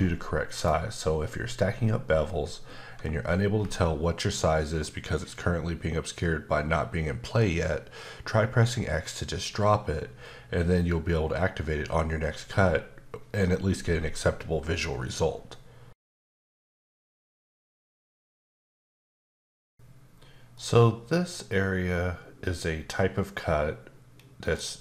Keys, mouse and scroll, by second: 0.5 click, 24.2 KP_Decimal, 24.7-24.8 scroll up 1.